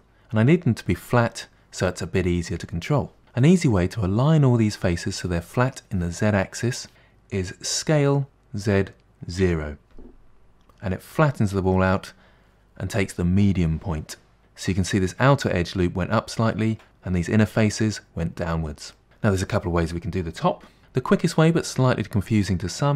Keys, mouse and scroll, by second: 8.0 s, 14.4-16.6 middle drag, 19.0 middle click.